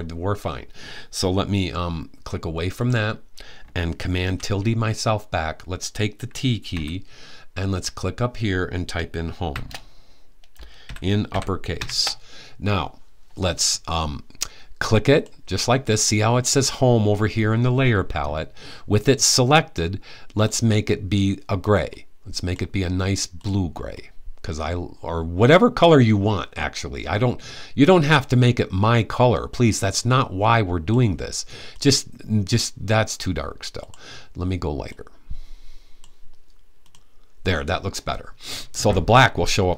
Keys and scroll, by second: 7.8 typing, 9.2 typing, 10.3-12.0 typing.